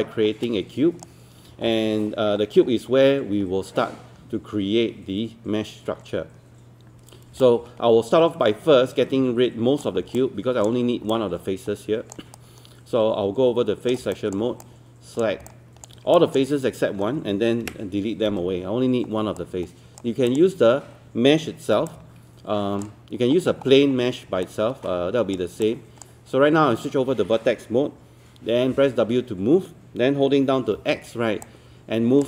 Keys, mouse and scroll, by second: 0.0-1.6 right drag, 1.6-2.6 scroll up 1, 7.4-10.0 drag, 10.2 alt+click, 11.1 alt+click, 12.4-14.0 right drag, 14.2 alt+click, 15.5 alt+click, 16.2 alt+click, 17.6 Delete, 19.4 right click, 20.3 click, 23.2-23.5 scroll up 1, 24.4-25.6 right drag, 25.6-26.7 drag, 28.7 w, 31.2-32.2 typing, 31.4 click.